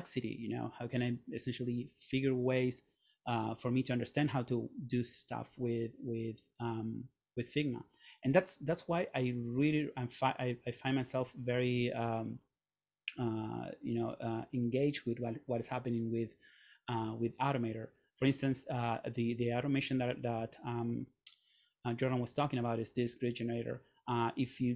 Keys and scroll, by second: 21.9 super+..